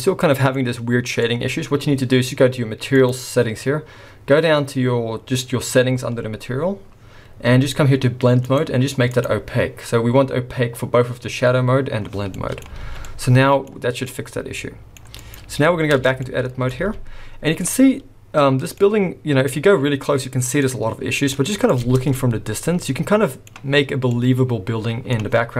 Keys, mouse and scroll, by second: 0.2 middle click, 1.2 scroll up 1, 1.2 middle click, 2.9 click, 5.8-6.6 scroll up 10, 6.6-8.5 scroll down 9, 8.5 click, 8.5-9.3 scroll down 3, 12.3 middle click, 12.9 alt+a, 13.0 scroll down 2, 13.1 middle click, 14.0 middle click, 15.2 click, 16.0 Tab, 16.2 middle click, 16.8 alt+a, 17.7-18.2 scroll up 3, 18.8 middle click, 19.6 scroll up 2, 20.1 scroll down 2, 20.2 middle click, 20.9 scroll down 3, 21.3 middle click, 21.8 Tab, 22.0 scroll down 1, 22.1 middle click, 24.1 middle click.